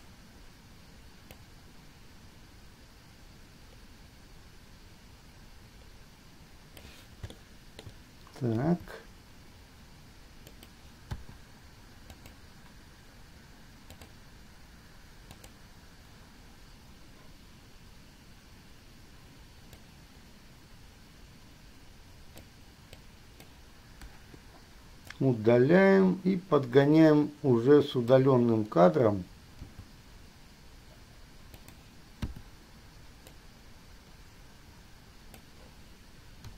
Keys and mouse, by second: 7.3-8.2 shift+middle drag, 8.8 g, 11.3 i, 12.3 click, 14.2 click, 15.6 click, 20.1-22.7 drag, 23.1-23.7 drag, 24.3 Delete, 25.4-26.2 drag, 29.8 g, 32.6 i.